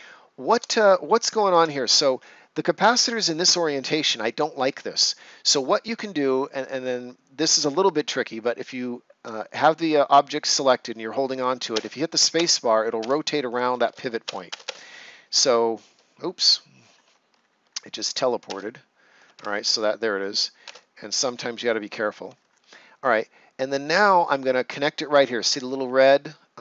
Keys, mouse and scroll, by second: 0.0-0.5 shift+scroll up 1, 0.8 ctrl+scroll up 1, 11.7 space, 16.2-16.7 scroll down 1, 17.1 scroll up 1, 17.2 ctrl+scroll down 1, 19.3 Escape, 20.6 space, 22.2-22.9 ctrl+scroll up 1.